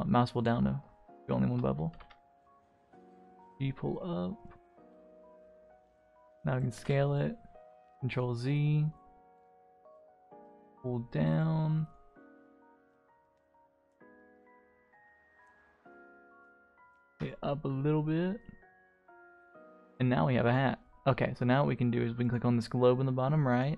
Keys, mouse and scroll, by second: 1.1 alt+click, 1.9 g, 3.2 Tab, 3.4-4.0 middle drag, 4.1-4.4 scroll down 2, 4.3 scroll up 1, 4.4-5.0 middle drag, 5.1-5.9 scroll down 2, 5.9 s, 6.7 s, 8.3 middle drag, 8.5 click, 8.8-9.2 middle drag, 9.4 click, 10.0 g, 11.5 middle drag, 11.8 click, 12.1 scroll up 1, 12.2-13.2 middle drag, 13.3 click, 14.3 click, 14.6 scroll up 1, 14.7 Tab, 15.5 a, 15.7 r, 17.1 Tab, 17.2 click, 17.4-18.4 middle drag, 18.5-18.9 scroll down 3, 18.9 scroll up 1, 18.9-19.3 middle drag, 19.5-19.8 scroll down 1, 19.8-20.4 scroll up 1, 20.4 click, 20.4 scroll up 1, 20.9 middle click, 22.2 click, 23.5 click.